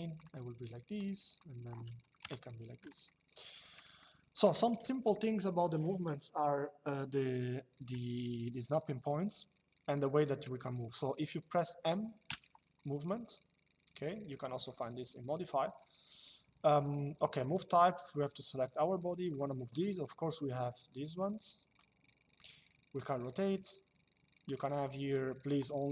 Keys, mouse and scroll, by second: 1.9 KP_Enter, 2.7 shift+middle click, 4.8 shift+middle click, 12.0 m, 19.0 click, 20.2 click, 21.4 click, 22.7 click, 25.7 click.